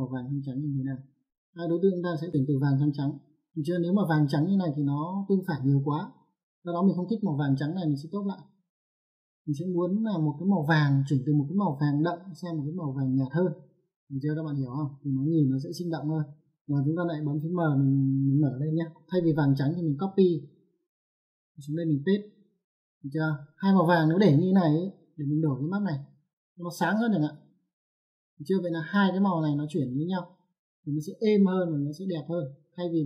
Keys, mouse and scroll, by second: 8.9 click, 16.3 click, 17.8 click, 20.2 right click, 21.0 click, 21.6 right click, 22.6 click, 25.7 click, 27.5 click, 31.8 click.